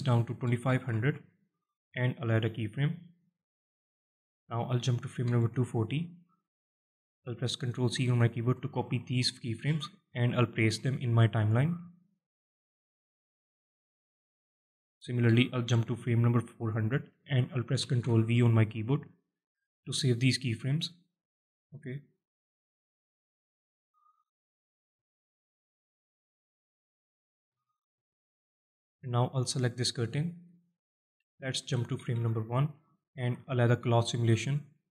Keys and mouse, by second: 0.7 KP_0, 2.9 click, 3.9-5.9 drag, 6.3 click, 6.6-7.8 drag, 8.6 ctrl+c, 9.5 ctrl+c, 10.4 ctrl+v, 11.0 click, 12.4-12.9 drag, 14.4-16.6 drag, 15.5 KP_0, 17.6 ctrl+v, 23.2 click, 25.3-25.9 alt+middle drag, 26.5 middle click, 27.5-27.8 shift+middle drag, 27.9-28.8 middle drag, 30.0 shift+middle drag, 30.5 middle click, 32.3 shift+Left, 32.8-33.1 shift+middle drag, 34.0 click.